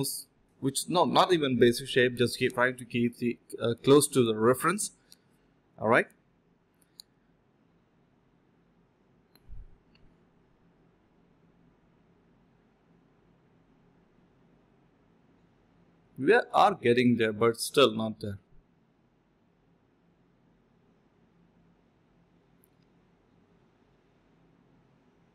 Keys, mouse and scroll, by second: 3.1 1, 5.3 typing, 7.0 typing, 10.1 typing, 10.6 alt+click, 12.5 alt+click, 12.7 alt+click, 12.9 d, 13.8 alt+click, 14.2 alt+click, 14.3 alt+click, 15.4 scroll down 1, 15.5 middle click, 15.6-16.4 scroll up 2, 15.8 middle click, 16.4 alt+click, 16.7 alt+click, 22.3-23.7 typing, 24.9-25.3 typing.